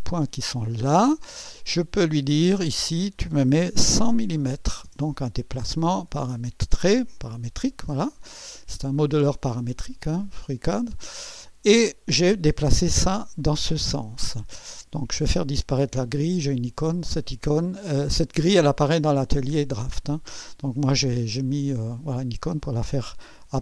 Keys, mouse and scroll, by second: 0.8 click, 2.6 click, 4.1-5.4 typing, 7.1 click, 8.4 scroll down 1, 8.9-11.0 drag, 9.6 typing, 11.2 scroll up 1, 13.2 right click, 14.3 right click, 16.7 click, 21.4 click, 22.6 scroll up 1, 23.5 scroll down 1.